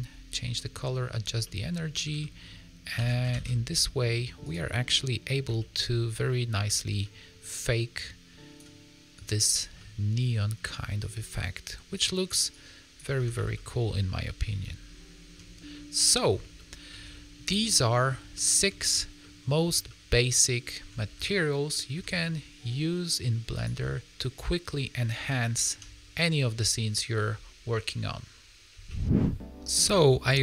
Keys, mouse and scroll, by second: 0.5 middle click, 1.2 scroll down 2, 1.4 middle click, 2.1 shift+middle click, 2.9 shift+d, 4.6 middle click, 5.5 shift+middle click, 5.8 scroll up 4, 6.2 middle click, 6.6 shift+middle click, 7.0 middle click, 7.9 click, 9.2 click, 9.7 middle click, 11.1 click, 12.4 click, 13.1 a, 13.3 a, 13.5 middle click, 14.6 ctrl+middle click, 15.6 middle click, 16.5 shift+middle click, 17.0 ctrl+middle click, 17.6 middle click, 18.3 shift+middle click, 19.1 middle click, 19.8 shift+middle click, 21.2 ctrl+middle click, 23.5 click, 25.2 ctrl+middle click.